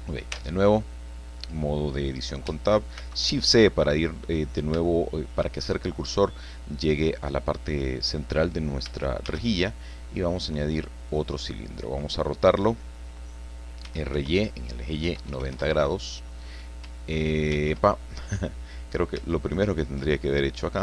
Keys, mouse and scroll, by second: 0.3 Tab, 3.0 shift+c, 3.9-4.2 scroll up 2, 4.2-4.8 scroll down 4, 4.9 shift+middle click, 5.4 shift+click, 9.2 shift+a, 11.1 click, 13.8 r, 14.1 y, 15.0 KP_9, 15.2 KP_0, 15.5 KP_Enter, 17.5 ctrl+z, 18.4 scroll up 2, 19.3 shift+middle click, 19.4 shift+click.